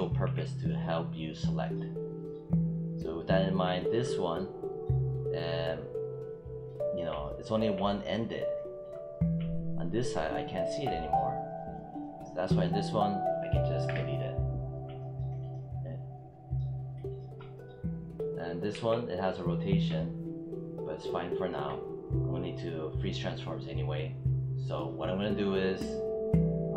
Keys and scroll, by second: 0.1 w, 13.7 BackSpace, 18.5 w.